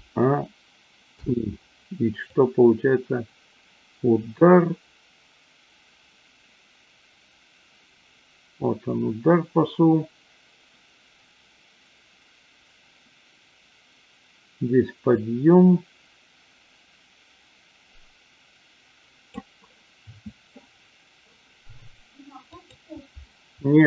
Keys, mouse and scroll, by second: 1.1 i, 2.3-19.3 drag, 22.4 click.